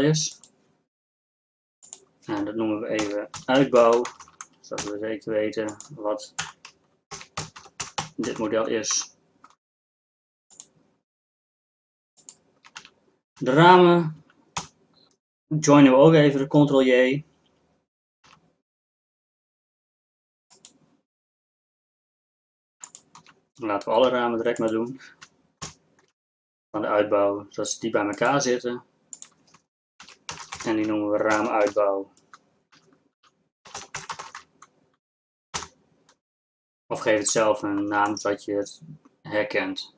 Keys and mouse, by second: 11.2 z, 12.1 z, 12.8 z, 13.5 z, 14.6 ctrl+j, 18.3 g, 24.2 g, 25.7 ctrl+j, 26.8 g.